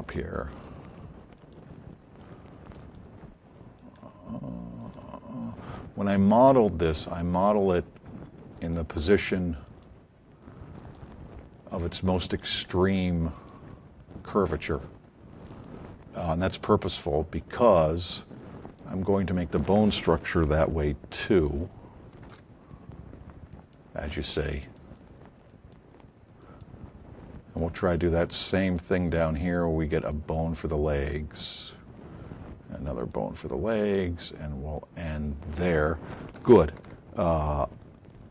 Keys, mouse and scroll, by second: 0.5 click, 1.4 click, 2.8 click, 3.8 click, 4.8 click, 6.1 click, 7.6 click, 8.5 click, 9.6 click, 10.8 click, 12.0 click, 13.3 click, 14.5 click, 15.4 click, 16.4 click, 17.3 click, 18.6 click, 22.2 shift+click, 23.5 click, 24.5 click, 25.5 click, 26.4 click, 27.4 click, 28.6 click, 30.1 click, 31.4 click, 32.9 click, 34.7 click, 36.8 shift+click.